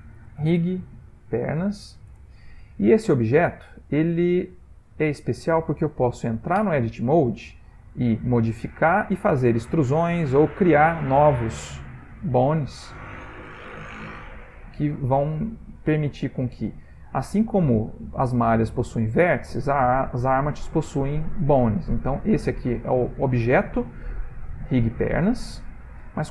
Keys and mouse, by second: 4.0 middle click, 4.2 middle click, 5.1 shift+middle click, 5.3 shift+middle click, 6.6 Tab, 7.8 g, 9.6 e, 11.3 shift+a, 12.4 click, 12.6 g, 13.8 middle click, 14.4 click, 14.5 g, 15.3 click, 15.5 g, 16.5 click, 16.8 g, 17.6 click, 17.8 g, 19.1 Tab, 22.2 g.